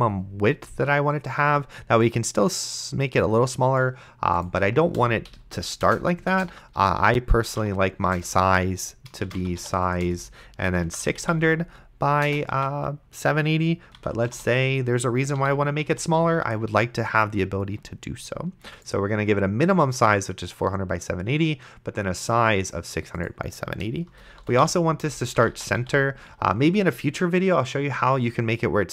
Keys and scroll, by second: 5.6 ;, 5.9 BackSpace, 6.3 Return, 7.2-8.1 typing, 8.2 Return, 9.1-12.2 typing, 12.5 Tab, 13.7-14.8 typing, 15.4 End, 15.9 ,, 24.1-26.3 typing.